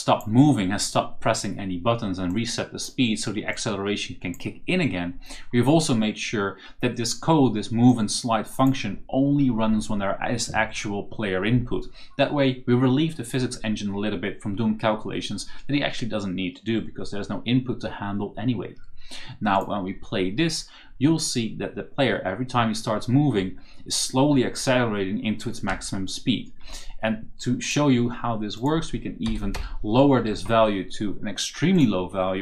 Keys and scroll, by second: 22.0 a, 23.3 d, 25.3-26.2 typing, 29.4 BackSpace, 30.1 4.